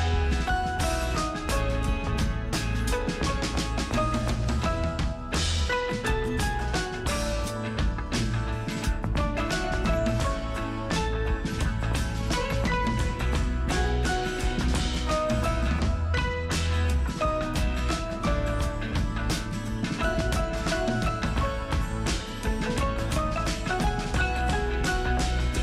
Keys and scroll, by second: 4.8 ctrl+alt+z, 14.2 space, 14.8 space, 19.6 space, 20.8 alt+space.